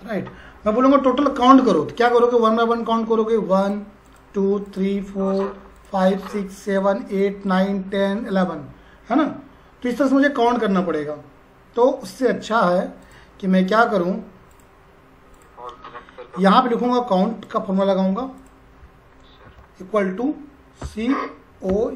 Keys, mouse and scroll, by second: 3.6 click, 13.0 click, 17.4 click, 19.4 =, 20.8-21.9 typing.